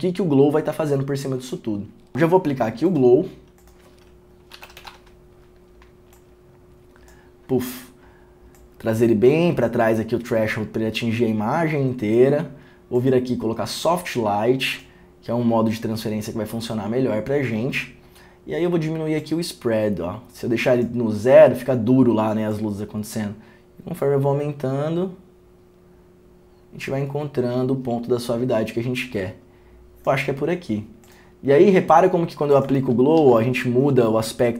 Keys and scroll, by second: 4.5-5.5 typing, 32.8 w, 32.9 ctrl+d, 33.3 ctrl+d.